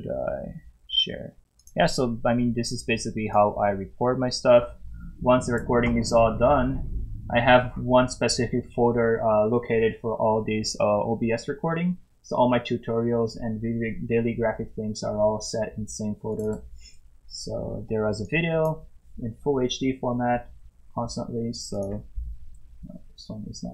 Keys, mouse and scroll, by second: 1.6 click.